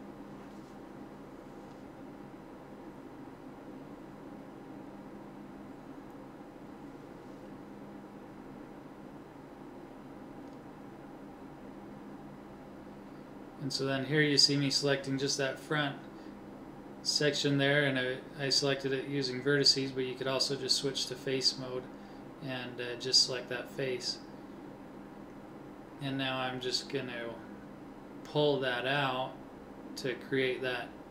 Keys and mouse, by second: 2.1 KP_1, 3.5 ctrl+Tab, 5.3 click, 6.1 c, 14.4-15.9 drag, 19.8 b, 27.9 middle click.